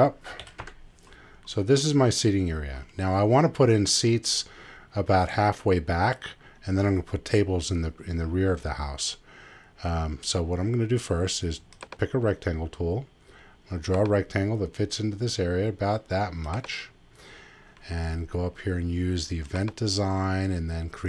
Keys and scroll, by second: 0.4 '.